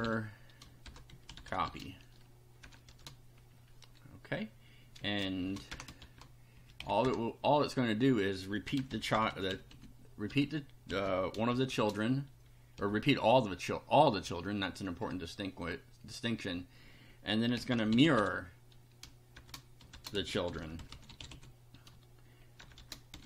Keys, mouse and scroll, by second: 0.0-2.9 typing, 5.0 space, 5.4 shift+[, 5.7 shift+Return, 6.0 shift+], 6.6 shift+Up, 6.8 shift+End, 7.0 shift+Return, 8.4-12.8 typing, 14.3 Return, 17.2-23.2 typing.